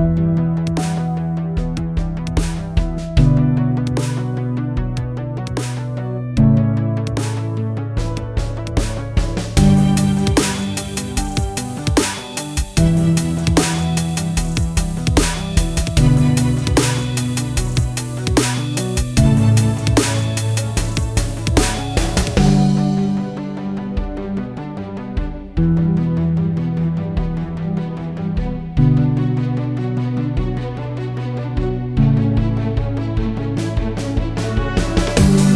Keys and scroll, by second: 9.0 F9, 14.9 Right, 15.1 s, 15.4 Return, 28.5-29.4 typing, 30.4-33.5 typing.